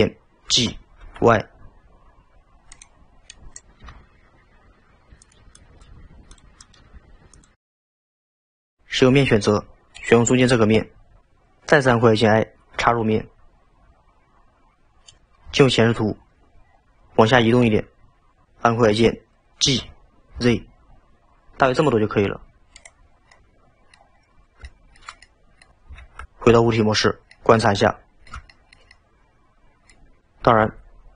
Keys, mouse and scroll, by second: 0.6 g, 3.3 drag, 3.9 g, 5.6 click, 6.0 g, 6.7 click, 6.8 g, 9.1 3, 10.0 click, 15.5 KP_1, 16.7-17.9 scroll up 6, 19.7 g, 23.1 scroll down 4, 23.3-24.2 middle drag, 24.2-24.8 scroll down 2, 24.8-25.8 shift+middle drag, 26.0 alt+z, 26.5 Tab, 27.4-30.2 middle drag.